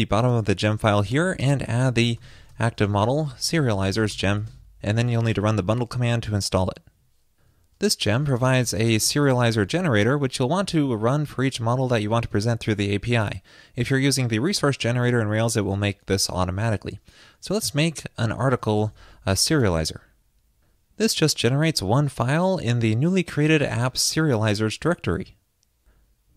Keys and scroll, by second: 4.6 super+s, 5.4 super+s.